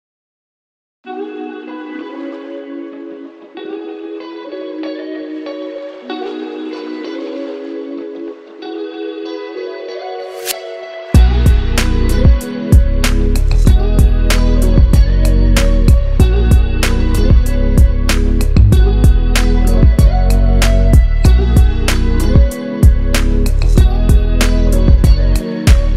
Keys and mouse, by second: 0.2 ctrl+KP_6, 0.3-1.7 ctrl+KP_6, 3.3-8.4 drag, 9.7-15.1 drag, 15.4-17.1 middle drag, 17.1 Tab, 18.6 KP_7, 20.5-23.0 ctrl+middle drag, 23.0 click, 25.4-25.9 middle drag.